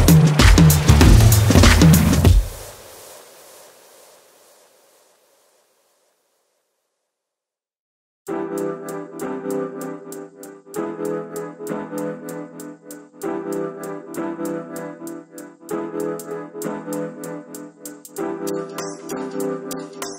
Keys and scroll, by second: 1.1-3.8 typing, 14.1-16.3 [, 16.6 [.